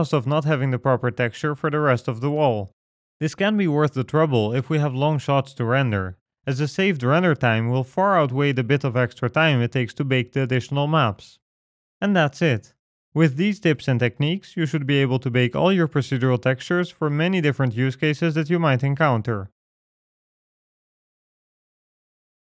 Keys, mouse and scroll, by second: 0.5-1.1 scroll up 1, 1.1 shift+middle click, 2.2-2.7 scroll down 5, 2.7 middle click, 3.7-4.3 scroll up 4, 7.6-8.9 scroll down 10, 9.3-10.3 scroll down 7, 9.7 middle click, 14.3 ctrl+space.